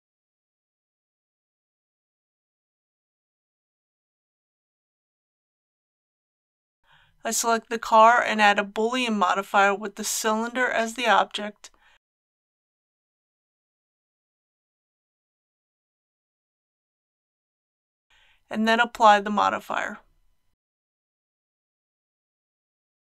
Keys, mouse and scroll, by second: 2.9 click, 3.5-5.9 middle drag, 6.8 click, 19.2 ctrl+a, 20.7 click, 21.3 g, 21.8 x, 22.6 click.